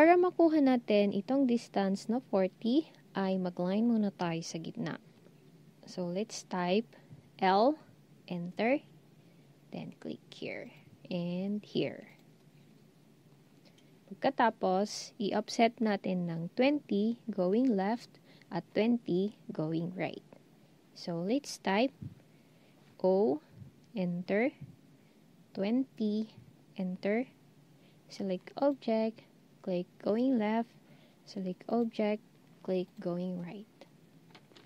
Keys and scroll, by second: 7.4 l, 23.0 o, 25.5-26.2 typing.